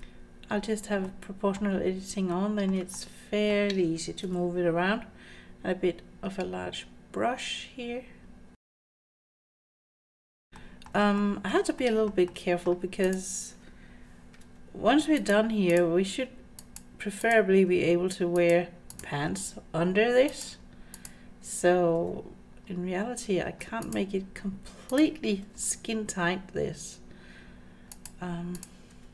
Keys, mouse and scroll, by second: 1.0 middle click, 2.3 shift+middle click, 3.0 middle click, 3.6 scroll down 1, 4.3 g, 8.8 click, 9.0 g, 9.5 middle click, 9.7 scroll up 4, 9.8 click, 10.0 g, 10.3 click, 10.5-10.9 scroll down 2, 10.5 g, 10.6 middle click, 11.2 shift+middle click, 11.5 shift+scroll down 1, 11.8 middle click, 12.3 middle click, 12.7 click, 13.1 click, 14.4 g, 15.7 click, 16.1 g, 17.2 click, 17.7 g, 18.9 click, 19.3 g, 21.0 click, 22.0 g, 24.9 click, 25.4 g, 28.5 click, 28.9 g.